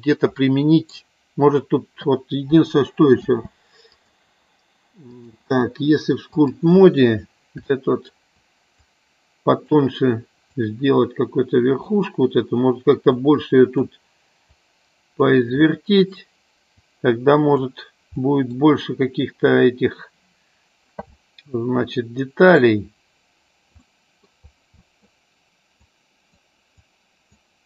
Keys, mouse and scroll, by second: 0.4 middle click, 3.3 space, 5.1-6.6 drag, 7.7 shift+click, 8.8 click, 10.6-11.8 drag, 13.3 click, 14.4 click, 15.5 middle click, 16.8 click, 18.1 middle click, 19.6-20.8 drag, 21.1-22.4 middle drag, 23.7 middle click, 24.7 middle click, 25.8 click, 26.8 click.